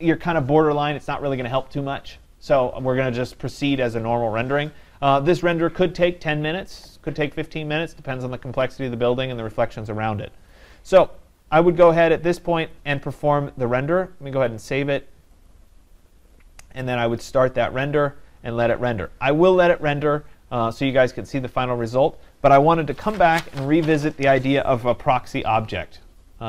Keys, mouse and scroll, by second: 12.7 click, 14.6 click, 15.5 click.